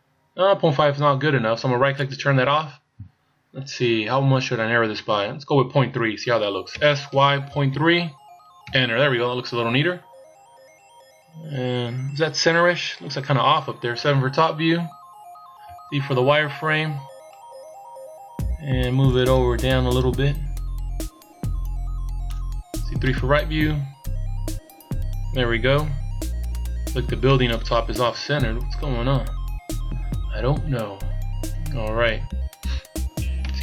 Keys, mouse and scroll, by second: 6.8 s, 10.9-11.2 scroll up 2, 12.1-14.0 scroll down 1, 14.0 scroll down 1, 14.0 KP_7, 15.0-15.5 scroll down 2, 15.6 z, 16.5 scroll up 1, 19.1 click, 23.0 KP_3, 23.8-25.5 scroll up 2, 25.5-26.3 scroll down 3, 27.3 middle click, 28.0 KP_7, 31.6 KP_1, 33.4 z.